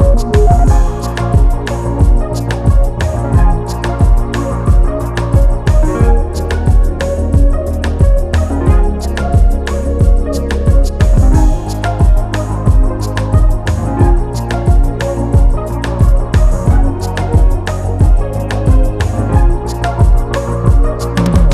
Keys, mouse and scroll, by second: 0.1-2.7 drag, 2.7 KP_0, 2.9 KP_0, 4.9 click, 7.2 click, 8.5 shift+a, 11.9 s, 15.4-16.8 scroll up 26, 17.6 click, 19.0-19.8 scroll down 22, 20.3-21.0 scroll down 3, 21.0 scroll up 2.